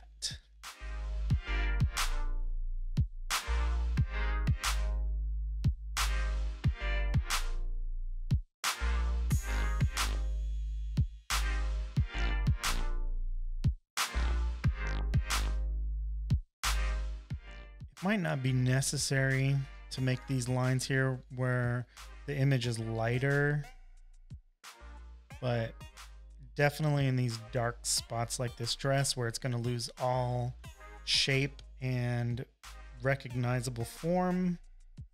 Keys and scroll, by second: 0.2-1.5 typing, 0.8 super+j, 2.1 shift+super+u, 4.9 z, 5.2 v, 5.3 space, 6.5-8.8 typing, 6.8 shift+super+n, 7.1 Return, 10.9 typing, 12.2 space, 13.6 typing, 32.8 super+-, 32.9 super+-.